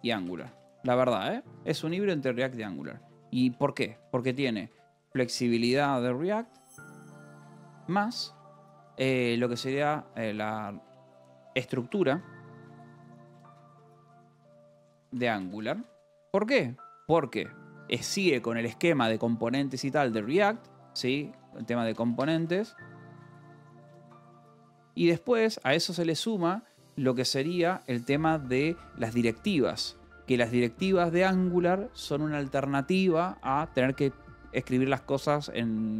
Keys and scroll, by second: 0.0-1.8 typing, 0.7 Escape, 2.4 Escape, 3.0-8.4 typing, 9.6-15.6 typing, 15.8 Escape, 17.4 o, 18.7-26.7 typing, 28.6-30.2 typing.